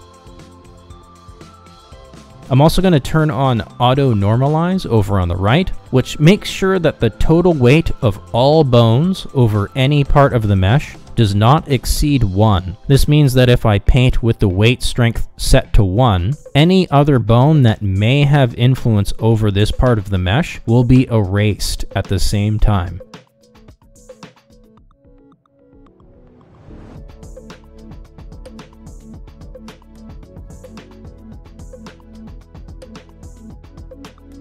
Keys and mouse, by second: 8.0 click, 11.6 click, 18.9 click, 26.3 click, 26.7 shift+middle click, 29.3-30.4 drag, 31.3-33.1 drag, 33.2 middle click, 34.3-34.4 drag.